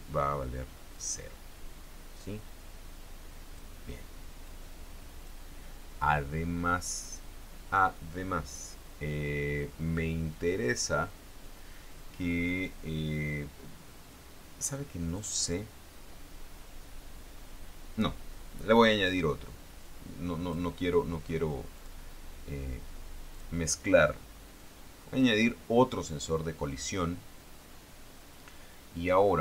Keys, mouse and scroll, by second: 1.1-3.9 drag, 4.6 click, 14.9 click, 20.0 click, 22.0 click, 23.5 click, 24.8-26.3 drag.